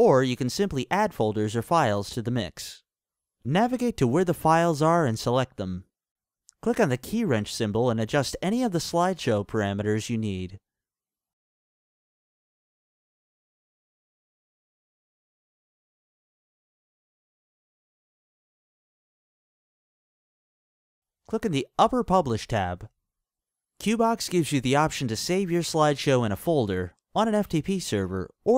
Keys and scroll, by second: 8.5-11.6 typing.